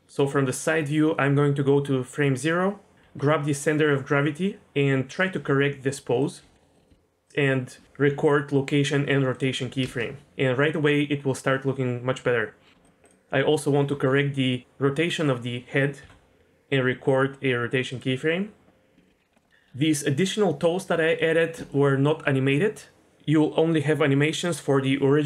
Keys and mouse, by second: 1.8 click, 3.0 g, 5.4 r, 6.4 g, 6.8 r, 6.9 g, 7.5 shift+middle click, 9.8 space, 13.9 r, 15.1 click, 16.0 i, 19.0 shift+middle drag, 19.3 middle drag, 21.2 middle drag, 21.7-22.1 shift+middle drag.